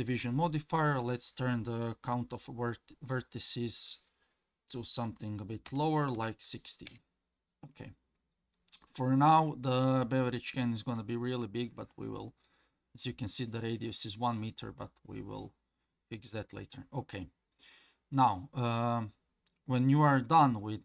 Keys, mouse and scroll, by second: 19.8 click.